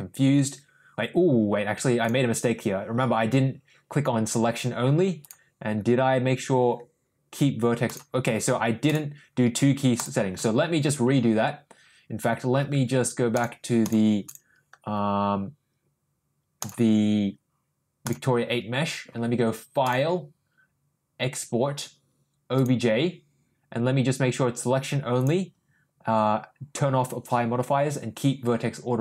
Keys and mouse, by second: 13.3 click, 13.8 click, 14.2 click, 16.5 click, 19.8-22.7 drag.